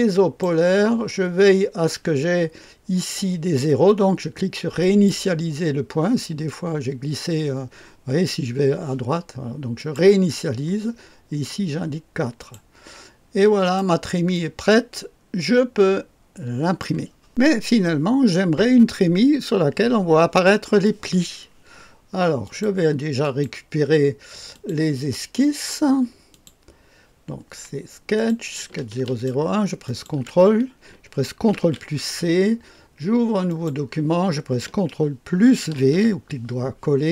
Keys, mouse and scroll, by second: 4.8 click, 9.7 click, 10.9-12.3 scroll down 2, 12.3 click, 13.6 click, 14.3-16.8 drag, 22.4 click, 23.2 click, 24.5 click, 26.2 click, 28.1 click, 29.0 ctrl+click, 29.7 ctrl+click, 31.5 ctrl+c, 33.4 click, 35.7 ctrl+v.